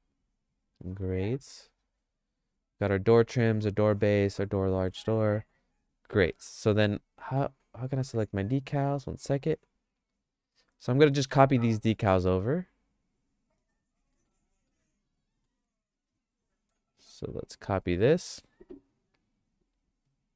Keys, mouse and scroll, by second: 0.9 click, 1.3 click, 2.9 click, 6.9 click, 9.1 click, 10.3 click, 11.6 shift+click, 13.1 shift+click, 14.1 middle click, 14.7 shift+middle click, 16.0 click, 16.9 shift+click.